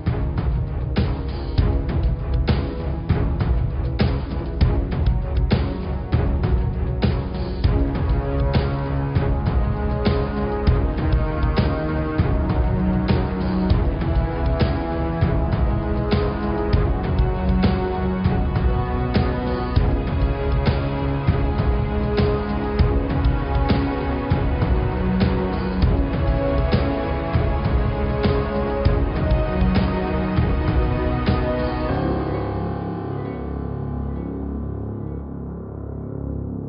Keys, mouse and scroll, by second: 0.4 g, 1.6 click, 3.3 click, 4.1 BackSpace, 4.6 KP_0, 4.6 KP_0, 6.4 click, 7.1 shift+a, 13.2 click, 30.3 click, 32.5-33.6 drag, 34.4-36.6 drag.